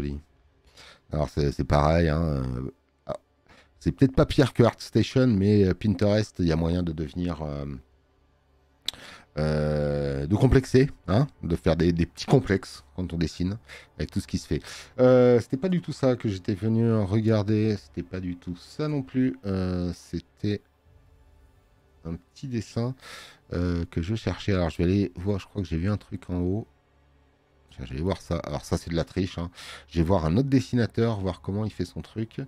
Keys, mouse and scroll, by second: 0.6 scroll up 1, 1.4 scroll up 2, 15.6 click, 17.1 scroll down 2, 21.2 scroll down 1, 22.4-23.4 scroll up 4, 24.8 click, 25.9 click, 28.2 click.